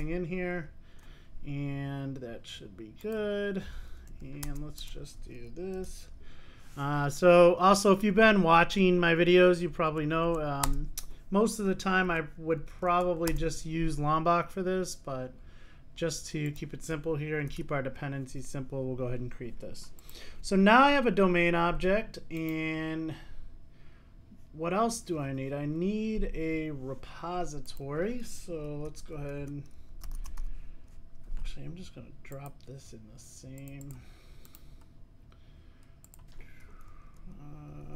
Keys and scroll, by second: 6.0 super+n, 19.3 super+s.